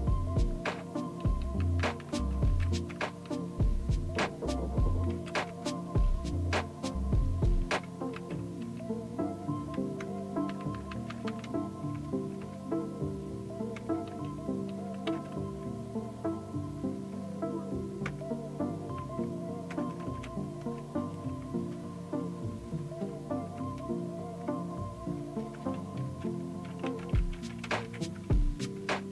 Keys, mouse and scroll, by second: 0.1 Down, 0.2-1.1 Down, 1.4-2.5 Down, 3.2-4.1 Down, 5.1 Up, 5.5 Return, 8.6 Down, 10.0 Return, 11.3 space, 11.9 Return, 14.1 Down, 14.7 Down, 15.1 Up, 18.1 Return, 19.7 Return, 21.6 Return, 26.1 Return, 27.2 Down, 27.8 Down, 28.6 Return.